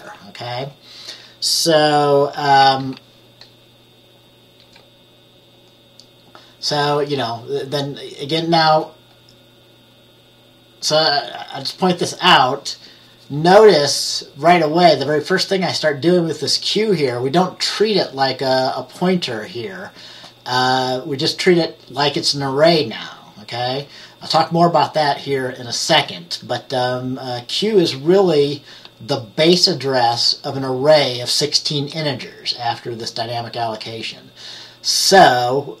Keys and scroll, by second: 2.7 F10, 4.7 F10.